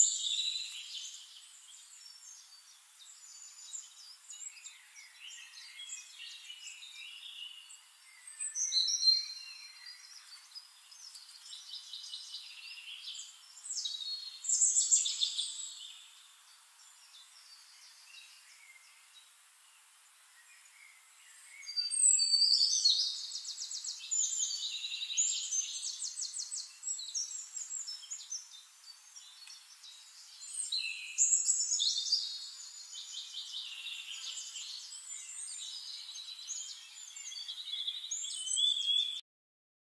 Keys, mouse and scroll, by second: 1.6 shift+-, 2.2 shift+middle click, 2.3 click, 3.3 shift+click, 4.1-5.5 ctrl+shift+drag, 6.4 middle click, 6.9-7.8 scroll up 1, 7.8 click, 8.1 scroll up 1, 8.6 click, 9.1 click, 11.6 ctrl+g, 12.1 ctrl+click, 14.9 middle click, 15.3-16.0 scroll up 2, 16.0 click, 17.0-21.0 drag, 21.5 ctrl+click, 22.1 click, 23.3 click, 23.5-24.1 scroll up 2, 24.1 middle click, 24.7 scroll up 2, 24.8 middle click, 26.1-27.3 drag, 27.6 Delete, 28.2 click, 28.5-30.2 drag, 31.2 click, 32.4 click, 33.2 click, 33.9 click, 34.0 middle click, 34.1 click, 34.2 middle click, 34.3 click, 34.4 middle click, 34.6 click, 34.7-37.9 middle drag.